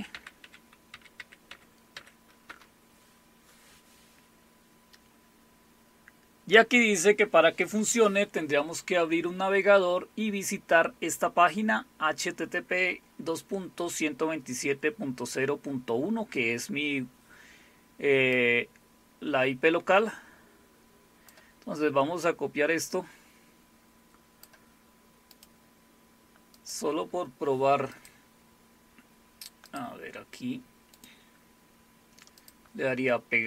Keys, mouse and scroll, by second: 18.3-21.3 drag, 22.9-24.7 drag, 25.3 right click, 26.5 click, 28.0 click, 29.7 click, 30.9 right click, 32.4 click.